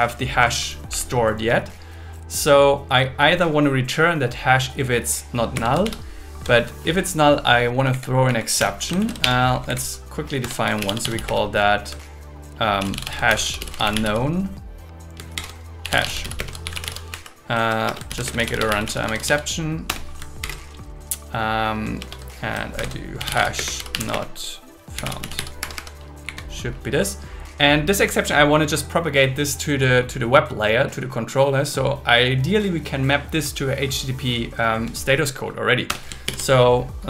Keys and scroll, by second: 0.9 Right, 5.5 space, 5.8 shift+ß, 7.7 Down, 8.6 Return, 9.2 BackSpace, 9.5 Down, 10.4 Return, 11.3 space, 12.8 shift+h, 13.3 shift+u, 15.3-18.4 typing, 17.1 Right, 19.9 Return, 20.4 shift+8, 22.0 shift+2, 22.8 shift+4, 23.5 space, 25.6 Escape, 26.2 Up, 35.9 Return, 36.2 alt+l.